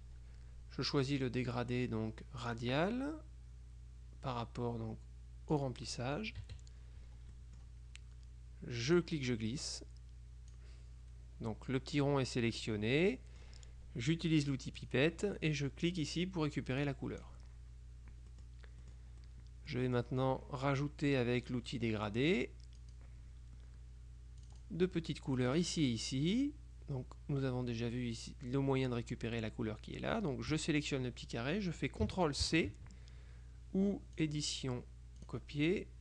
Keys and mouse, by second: 2.5 click, 5.6 click, 6.5 KP_Subtract, 7.4 middle click, 9.1-11.1 drag, 12.7 click, 14.9 click, 16.9 click, 18.4-19.5 middle drag, 20.0 middle click, 22.9 click, 24.5 click, 25.5 click, 30.6 click, 32.6 ctrl+c, 34.3 click, 35.3 click.